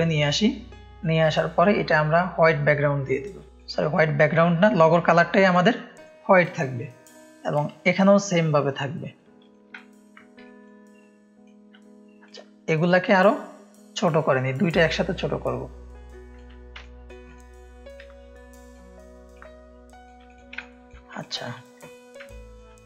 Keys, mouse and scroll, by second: 1.0 click, 2.0 click, 3.5-6.3 drag, 6.5 ctrl+space, 6.5 ctrl+click, 7.1 click, 7.5-9.1 alt+drag, 9.4 click, 9.7 ctrl+space, 9.7 ctrl+click, 10.4 ctrl+space, 10.4 ctrl+click, 11.0 ctrl+click, 12.2 click, 13.9-16.3 alt+shift+drag, 16.7 space, 16.8 click, 17.2 click, 17.9 shift+click, 19.3-20.0 shift+drag, 20.2 click, 20.5 ctrl+click, 20.6 ctrl+space, 21.1 space, 21.2 click, 22.2 ctrl+space, 22.2 ctrl+click.